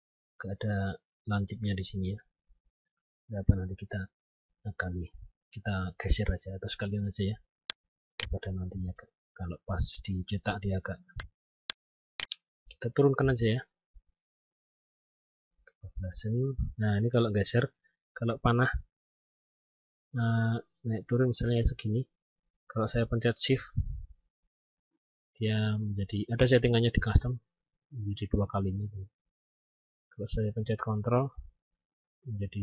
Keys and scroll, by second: 9.9 F10, 23.7 shift+Down.